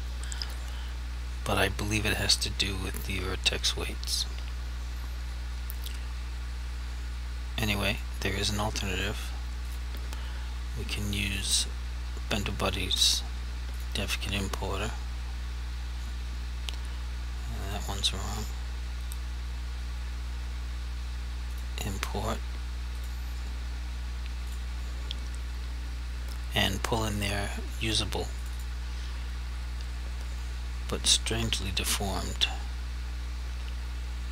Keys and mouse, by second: 7.9 click, 17.7 click, 21.6 click.